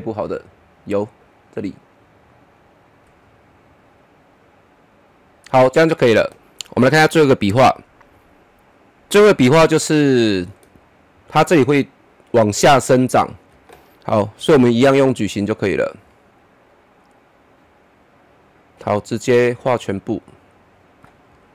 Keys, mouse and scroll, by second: 3.0 Up, 3.2 click, 7.6 click, 9.8-12.6 middle drag, 12.6-14.4 middle drag, 14.4 click, 18.8-21.3 drag, 21.3-21.5 middle drag.